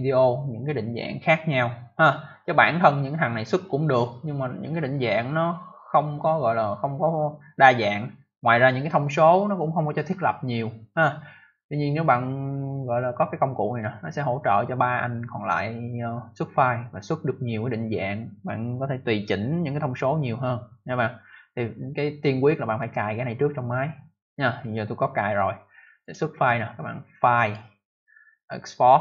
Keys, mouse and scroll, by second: 25.9 click, 27.3 click.